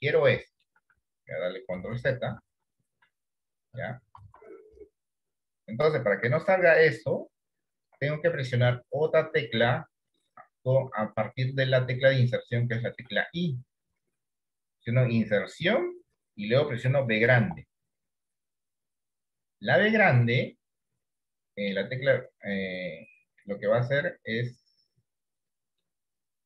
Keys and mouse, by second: 0.1 shift+middle click, 1.8 ctrl+z, 2.5 ctrl+z, 3.7 click, 4.3 ctrl+z, 6.3 d, 7.9 d, 8.9 shift+middle click, 12.4 shift+middle click, 26.0-26.4 middle drag.